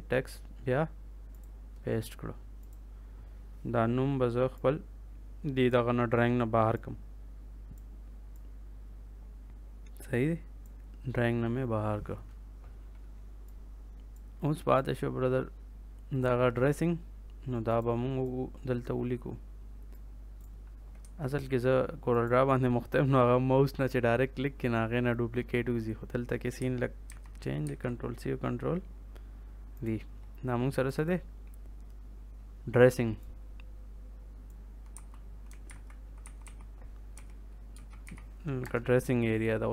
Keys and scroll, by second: 20.9 Escape, 27.0 ctrl+c, 27.5 ctrl+v, 34.8-38.0 typing, 38.5 Return.